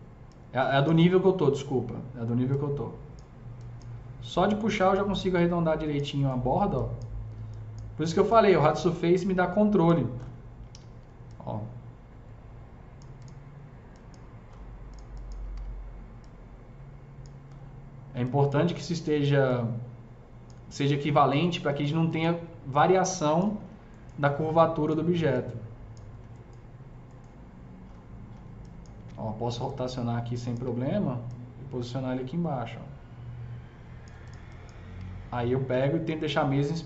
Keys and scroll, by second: 10.6 e, 15.4 w, 28.9 e, 30.4 w, 34.9 s.